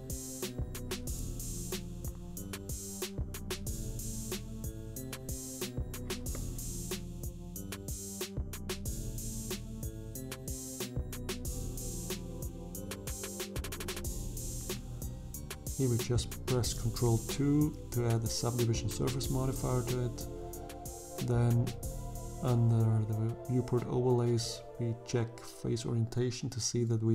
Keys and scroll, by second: 0.4 f, 3.6 f, 12.0 Tab, 14.2 ctrl+2, 17.2 Tab.